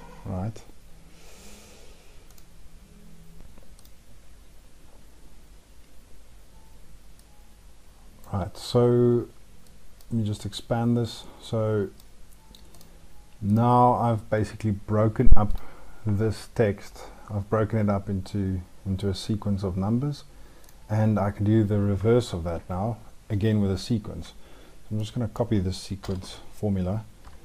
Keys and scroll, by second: 25.8 ctrl+c, 27.0 F2.